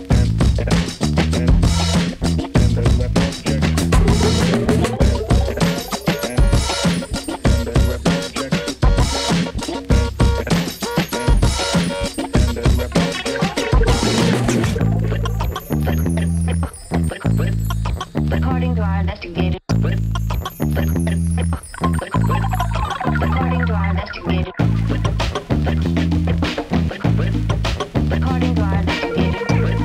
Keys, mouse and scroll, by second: 0.3 shift+Page_Up, 2.1-4.9 drag, 3.3-3.9 shift+click, 5.5 ctrl+space, 6.1-7.9 typing, 10.1 typing, 10.2-11.7 drag, 24.1-25.1 typing, 26.8-29.3 drag.